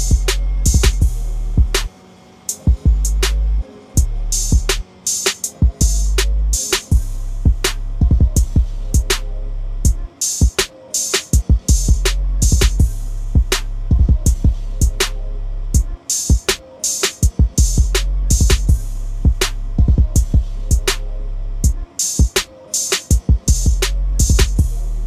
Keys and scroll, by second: 0.0 ctrl+a, 1.9 ctrl+c, 3.6 ctrl+v, 16.3 ctrl+a, 17.7 ctrl+c, 19.4 ctrl+n, 24.9 ctrl+v.